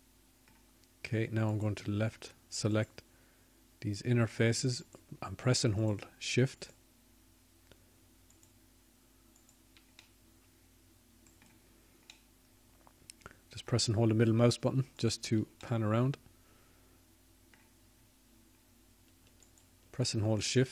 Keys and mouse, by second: 2.8-4.4 middle drag, 11.2 shift+click.